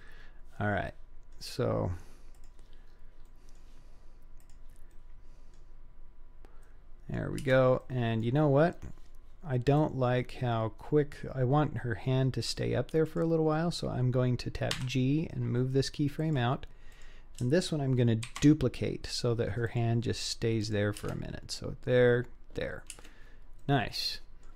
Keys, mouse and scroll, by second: 0.9-1.4 middle drag, 2.4 click, 2.9 scroll down 2, 3.3-3.6 middle drag, 4.4 click, 5.0-5.6 middle drag, 6.7-7.2 middle drag, 7.5 space, 7.8-8.2 middle drag, 8.7-9.8 scroll up 2, 9.8-12.6 drag, 13.1 click, 14.7 g, 16.9 click, 18.3 shift+d, 20.7 click, 21.0 space, 23.0 space, 23.6-24.5 middle drag.